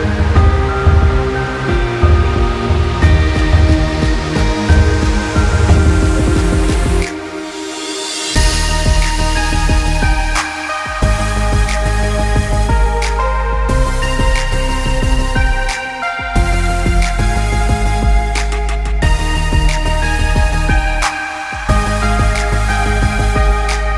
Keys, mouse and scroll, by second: 3.5 click, 7.1 click, 10.6 ctrl+z, 11.7 click, 13.9 click, 14.9 click, 18.9 click, 19.9 click.